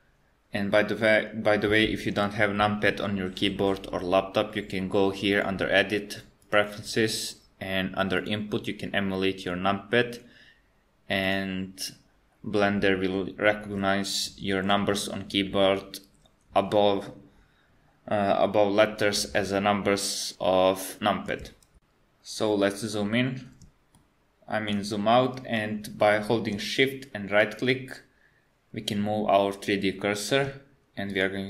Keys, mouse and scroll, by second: 5.3 click, 23.0-23.6 scroll down 3, 24.0 shift+middle click, 27.6 shift+right click, 31.3 shift+right click.